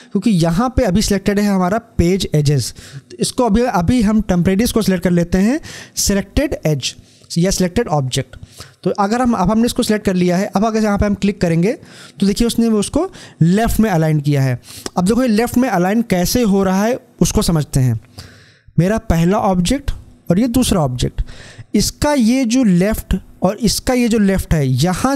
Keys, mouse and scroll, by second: 7.1 click, 11.5 click.